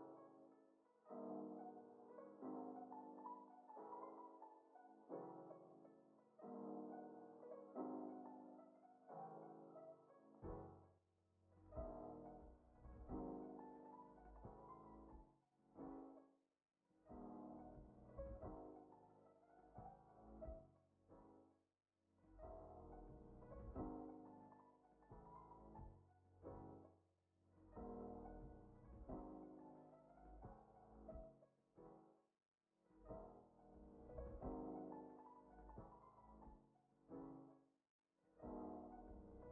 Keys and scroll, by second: 4.1 ctrl+c, 5.3 x, 6.8 alt+z, 8.8 z, 13.6 ctrl+c, 15.3 x, 16.9 ctrl+c, 19.0 z, 21.3 ctrl+c, 24.6 z, 25.1 ctrl+v, 29.5 ctrl+v, 31.0 Delete, 31.8 ctrl+s, 33.4 space.